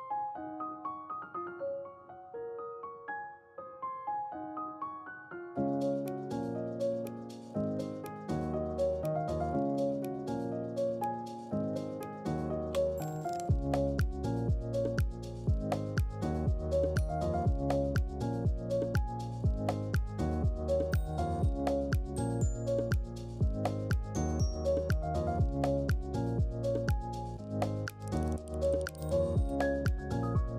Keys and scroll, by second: 0.0-0.9 typing, 21.7-22.4 typing, 27.0-29.0 typing.